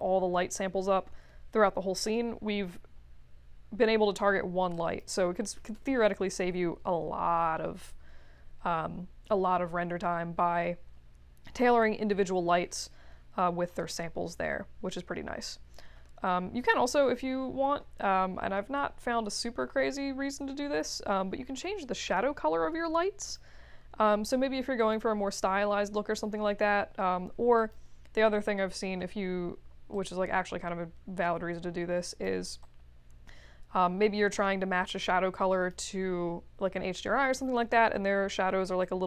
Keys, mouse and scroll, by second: 4.7 click, 5.5 3, 5.7 Return, 22.0 click, 23.2 click, 24.7 click, 27.5 click, 29.9-32.2 drag, 32.6-35.7 drag, 38.8 click.